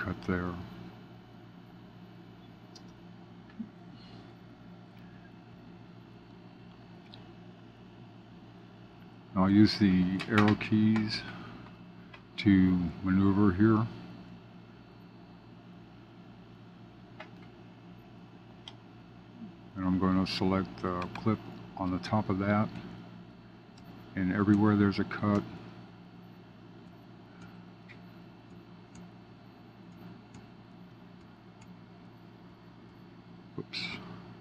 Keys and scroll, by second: 4.2 Up, 16.0 super+b, 22.7 Up, 23.7 super+b, 24.5 Up, 26.1 super+b, 26.8 Up, 27.9 super+b, 28.4 Up, 29.3 super+b, 29.8 Up, 30.6 super+b, 31.1 Up, 32.0 super+b, 32.4 Up.